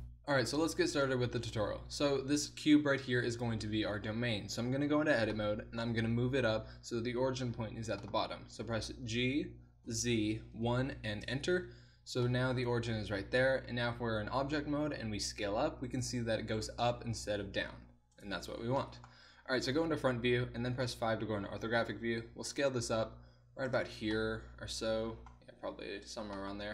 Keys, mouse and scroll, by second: 4.9 Tab, 9.1 g, 13.4 Tab, 15.1 s, 17.3 s, 19.8 KP_1, 20.8 KP_5, 22.4 s, 25.6 s.